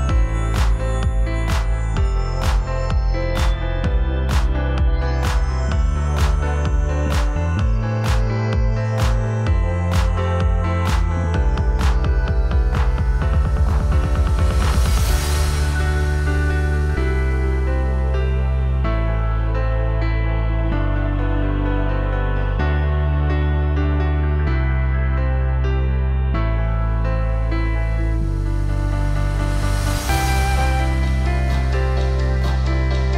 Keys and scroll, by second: 2.1 ctrl+t, 20.4 space.